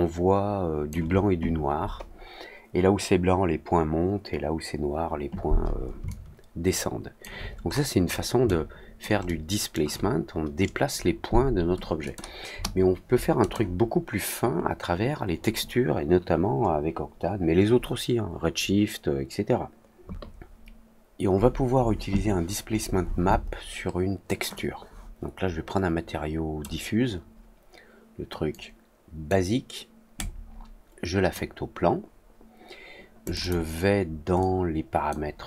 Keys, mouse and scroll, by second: 6.0-7.1 alt+drag, 7.6 scroll up 1, 7.7 scroll down 1, 8.0 scroll up 1, 8.4-8.9 alt+drag, 9.2-9.7 alt+middle drag, 12.0 click, 13.3 click, 24.5-26.5 drag, 28.4 click, 30.1-31.2 drag, 33.2 click, 33.3 click, 34.3-35.0 drag.